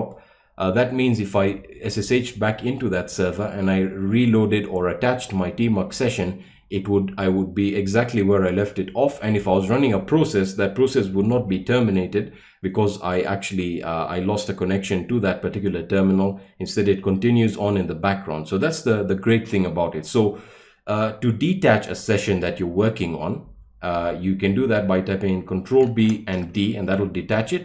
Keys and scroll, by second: 26.0 ctrl+b, 26.3 d.